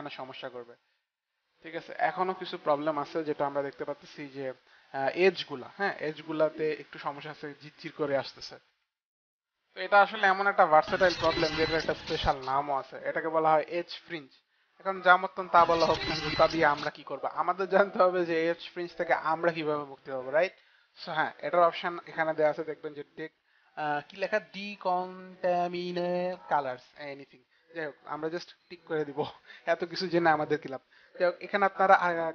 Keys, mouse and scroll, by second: 8.6 click, 8.7 F9, 28.7 click, 29.6 click.